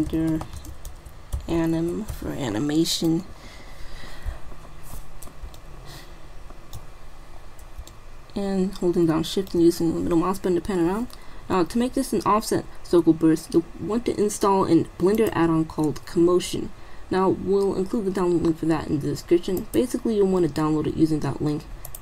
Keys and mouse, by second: 5.0-9.9 middle drag, 15.2-16.9 drag, 19.6 click.